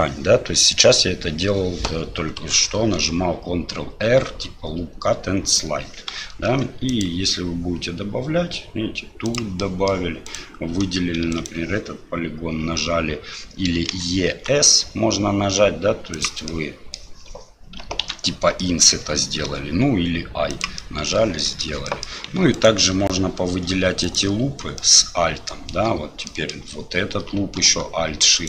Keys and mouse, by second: 6.5 ctrl+r, 9.7 click, 10.3 click, 11.3 click, 13.9 e, 16.6 click, 18.0 ctrl+z, 18.6 click, 19.5 i, 20.9 click, 21.5 shift+click, 21.8 click, 22.5 alt+click, 23.8 typing, 24.0 alt+click, 24.8 middle click, 26.2 middle click, 28.3 alt+shift+click.